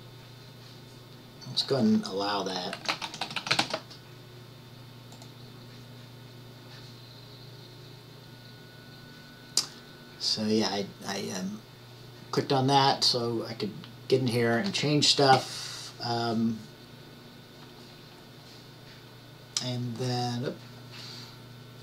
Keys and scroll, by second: 2.7-4.3 typing.